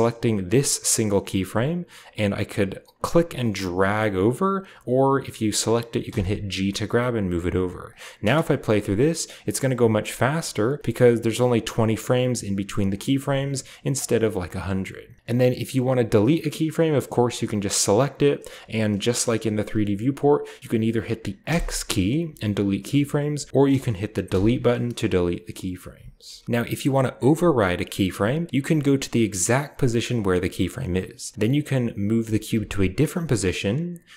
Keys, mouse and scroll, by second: 2.9-5.9 right drag, 5.9 g, 7.3-9.2 drag, 8.1 space, 9.7-11.5 scroll up 1, 10.2 g, 10.8-14.1 drag, 12.2-13.1 scroll down 1, 12.7 middle click, 13.1-14.9 typing, 13.7 scroll down 1, 13.9 middle drag, 15.2 ctrl+b, 15.4 drag, 15.6-15.9 middle drag, 15.6-15.9 scroll down 1, 15.9-17.3 drag, 17.7-18.8 right drag, 21.3 x, 24.1 Delete, 26.1 ctrl+z, 27.8-29.1 drag, 32.0 g, 32.4 z, 33.2 click.